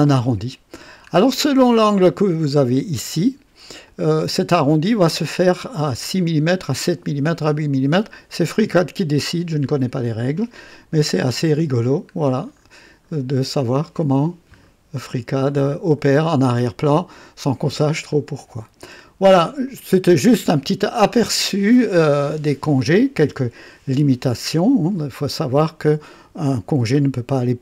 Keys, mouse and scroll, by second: 1.0-1.3 scroll down 2, 1.5-2.2 drag, 3.8-4.5 drag, 8.5 click, 9.5 click, 11.4-11.9 scroll up 3, 12.4-12.7 scroll down 2, 13.2 scroll down 2, 14.0 scroll up 2, 14.6 scroll down 2, 15.2 scroll up 2, 16.4 click, 18.1-18.9 drag, 19.6-20.3 right drag, 25.6-26.4 drag.